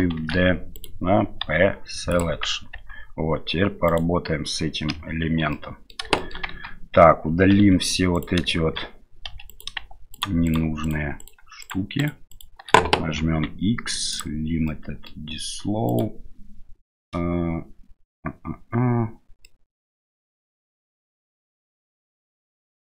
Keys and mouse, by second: 0.2 shift+d, 1.4 p, 2.7 Tab, 3.9 right click, 4.9 KP_Divide, 5.5 middle click, 6.2 shift+middle click, 6.5 Tab, 7.5 2, 7.9 3, 8.1 right click, 9.3 2, 9.5 right click, 10.1 shift+right click, 10.5-11.7 shift+right drag, 12.0 right click, 13.2 x, 14.8 middle click, 15.9 right click, 19.5-21.6 middle drag.